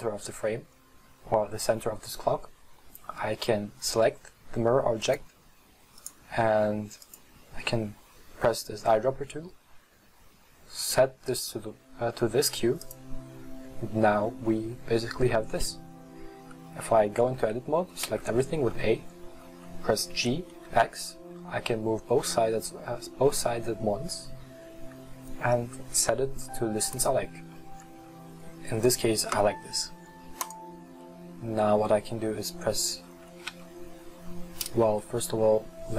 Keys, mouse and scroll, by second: 5.1-6.3 drag, 7.1 click, 17.3 Tab, 18.1 a, 20.2 g, 31.1-33.6 middle drag, 33.6 Tab, 34.9 KP_3.